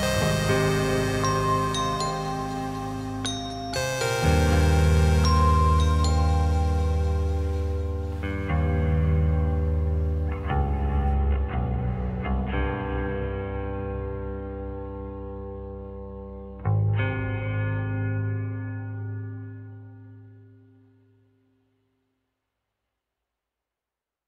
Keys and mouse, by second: 2.6-3.8 drag, 5.8 click, 7.7 click, 12.6 click, 13.5-14.9 drag, 16.8 /, 18.7 /, 20.8 click, 21.6-22.9 drag.